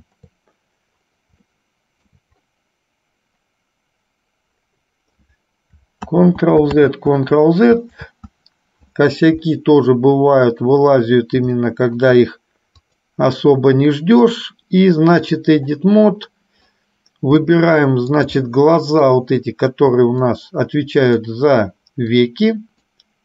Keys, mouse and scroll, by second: 1.6 shift+middle click, 6.2 ctrl+z, 7.1 ctrl+z, 10.1 middle click, 11.7 shift+middle click, 12.8 click, 14.3-15.6 drag, 17.6 middle click, 18.7 shift+middle click, 20.3-21.5 drag, 22.3 click.